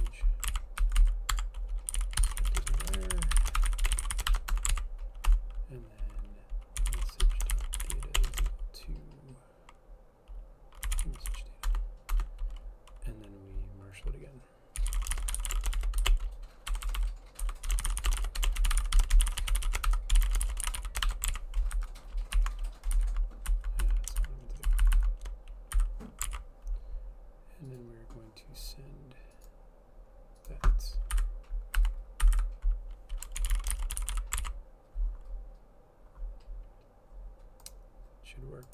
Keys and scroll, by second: 0.0-8.9 typing, 10.7-12.7 typing, 14.7-21.4 typing, 21.5 ctrl+s, 21.8 Right, 23.1 Down, 23.6 Left, 24.0 Left, 24.8 shift+Left, 25.0 shift+Left, 25.1-38.7 shift+Left, 25.9 Delete, 26.4 ctrl+s, 31.2 Delete, 31.9 BackSpace, 32.4 Delete, 32.5 Delete, 33.3-34.7 typing.